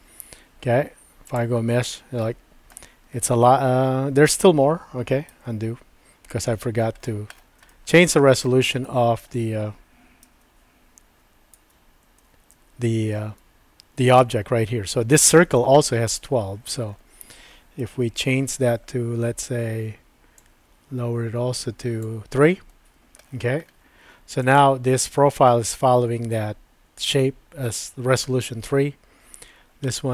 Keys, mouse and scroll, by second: 1.7 Tab, 2.3 middle click, 5.3 super+z, 7.7 shift+middle click, 8.8 shift+middle click, 10.2 super+z, 11.6 super+z, 13.4 Tab, 14.1 click, 17.8 KP_Decimal, 20.4-22.0 drag, 29.8 shift+middle click.